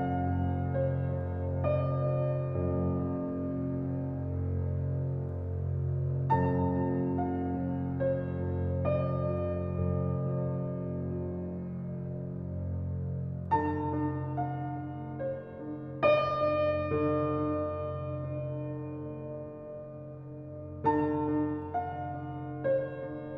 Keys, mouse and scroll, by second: 1.4 shift+click, 2.0 shift+click, 2.6 ctrl+b, 5.2 click, 6.2 shift+click, 6.5 shift+click, 7.1 shift+click, 7.3 shift+click, 7.6-9.0 middle drag, 9.0 e, 11.2 Tab, 11.3 scroll down 3, 11.6-12.0 middle drag, 12.0-12.7 scroll down 4, 12.2 shift+middle click, 12.7-13.5 middle drag, 13.5 click, 14.0 Tab, 14.2 click, 15.4 p, 16.2 Tab, 16.4 click, 17.2 ctrl+r, 17.9 Tab, 18.7 ctrl+r.